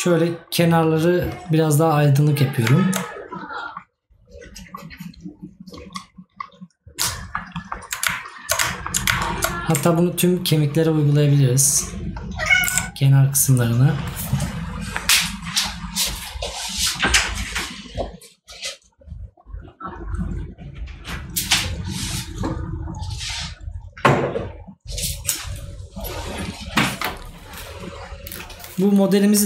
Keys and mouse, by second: 7.2 right click.